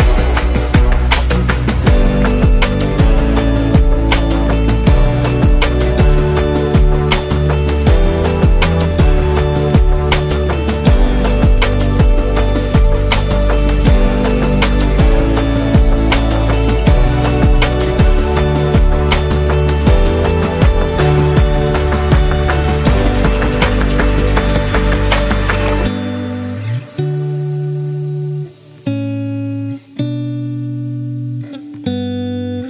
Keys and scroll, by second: 0.9 v, 28.1-29.0 typing.